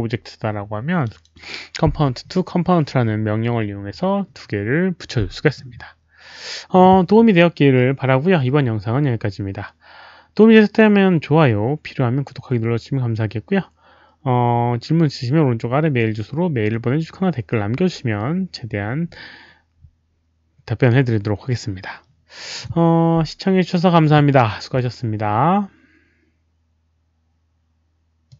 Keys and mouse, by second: 28.2 click.